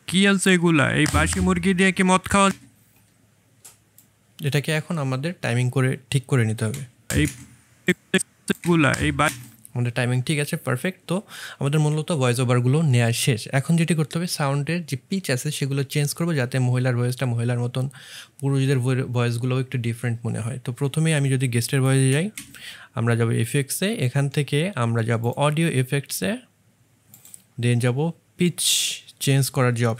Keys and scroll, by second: 6.6 space, 7.1 space, 8.5 space, 9.1 space, 22.0 space, 22.3 space.